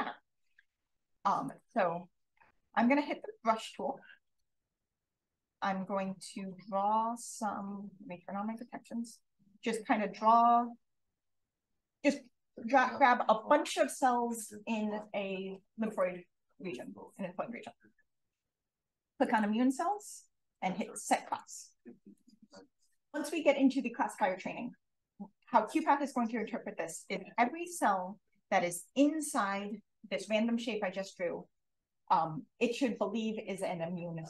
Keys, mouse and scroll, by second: 1.6 click, 3.9 click, 4.3 b, 5.6-7.5 drag, 7.8 s, 8.1 d, 8.5-10.8 drag, 19.2 click, 21.3 click.